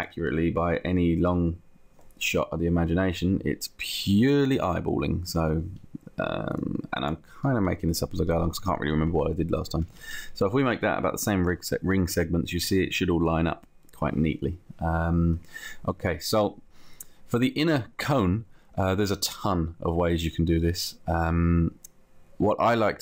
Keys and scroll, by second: 0.1 Up, 1.2 Down, 7.3 Up, 10.1 Down.